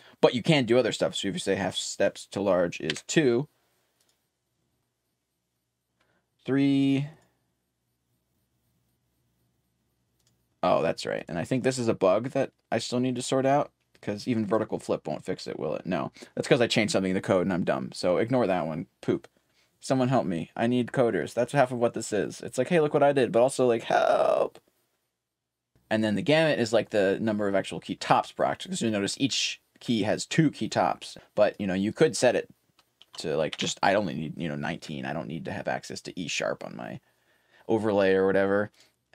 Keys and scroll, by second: 1.1-2.9 typing, 10.2-13.5 typing, 19.0-22.1 typing, 23.6-28.1 typing, 31.2-32.5 typing, 38.3-39.1 typing.